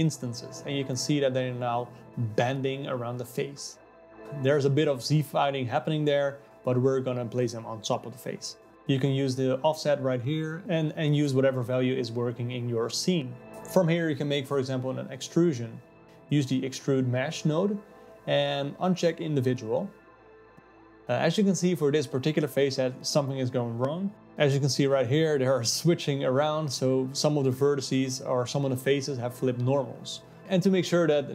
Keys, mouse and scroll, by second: 0.5 alt+middle click, 1.6-4.7 drag, 5.0-8.1 shift+drag, 10.3-13.3 alt+middle drag, 13.5 click, 13.5 shift+a, 18.6 click, 21.0-25.7 alt+middle drag, 25.7-27.9 drag, 28.2-31.3 middle drag.